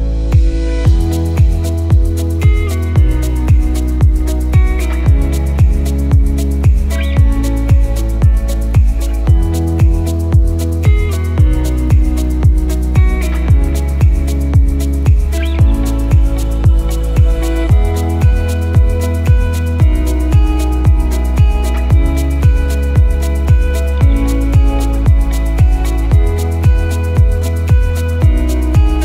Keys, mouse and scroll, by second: 3.4 alt+click, 4.0 alt+click, 4.7 alt+click, 5.1 KP_1, 6.5 click, 7.4 click, 11.1 click, 12.8 click, 15.3 click, 19.7 click, 20.4 KP_1, 20.8-21.4 scroll down 5, 21.9 click, 23.3-23.6 scroll down 2, 23.9 click, 25.3 KP_1, 25.8-27.0 scroll down 1, 27.0 Tab, 27.0-27.6 scroll down 2, 28.0 click.